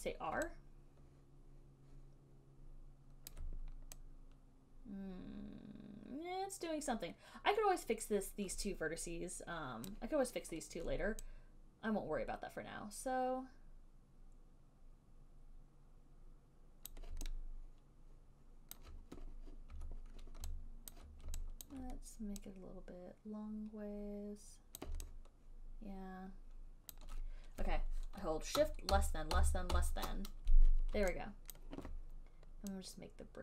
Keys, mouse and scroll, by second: 3.5 alt+click, 10.1 click, 17.1 click, 18.9 super+click, 21.2 alt+click, 21.9 alt+click, 25.0 click, 27.2 click, 29.1 <, 29.6 <, 30.0 <.